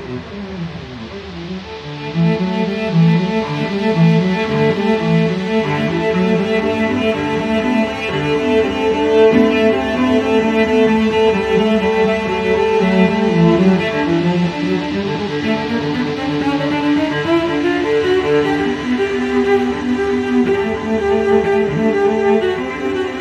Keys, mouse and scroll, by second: 6.1 2, 9.5-11.1 drag, 13.3-19.4 drag, 19.8 0.